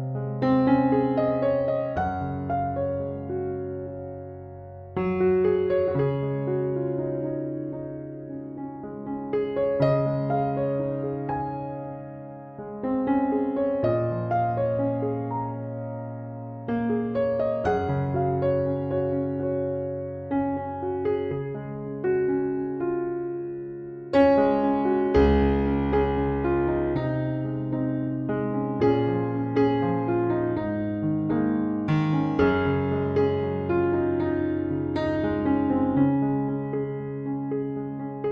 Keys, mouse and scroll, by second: 10.2 Escape, 18.4 Escape, 24.0 Escape, 34.6 5, 35.2 Return, 37.1 Escape.